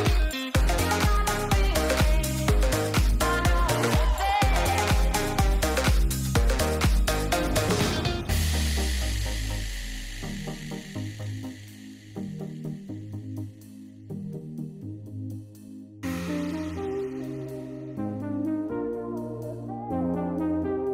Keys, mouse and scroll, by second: 2.7 shift+middle click, 3.0 shift+middle click, 5.3 shift+middle click, 7.1-8.2 drag, 8.5 click, 10.6-12.0 drag, 12.5 ctrl+z, 13.4-15.9 drag, 14.6 BackSpace, 18.0 ctrl+z, 19.5 ctrl+s, 20.1 shift+middle click.